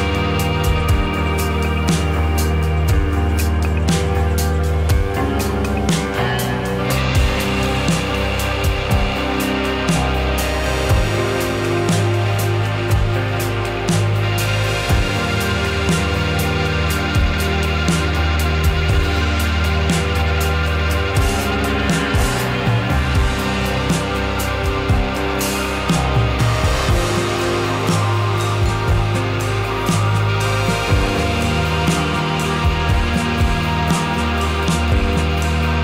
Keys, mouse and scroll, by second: 7.0 click, 8.2 click, 9.6 shift+a, 12.6 click, 13.8 click, 14.7-15.6 middle drag, 20.2-20.6 drag, 21.3-22.3 middle drag, 22.7-23.4 drag, 23.4 middle click, 24.3 click, 25.3 click, 26.4 `, 28.1 click, 29.2 click, 31.2-32.2 middle drag, 33.0-34.1 middle drag, 34.3-35.3 shift+middle drag, 35.3 click.